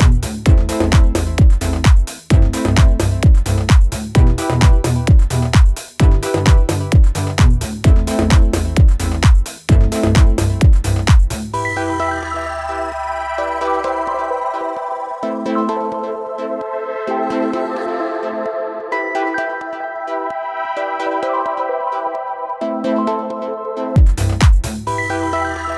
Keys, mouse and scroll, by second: 7.1 click, 16.4 click.